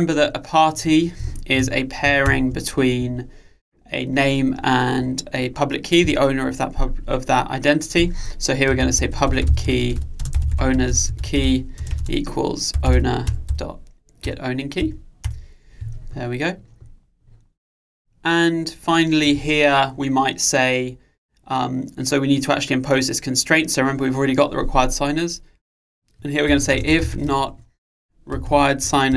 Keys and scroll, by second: 3.0 alt+Return, 13.3 Return, 28.9 Return.